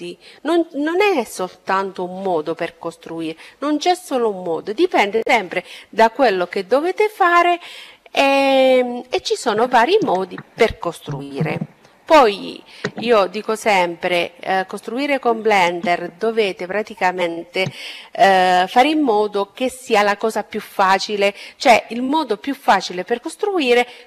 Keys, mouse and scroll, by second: 11.6-13.4 middle drag.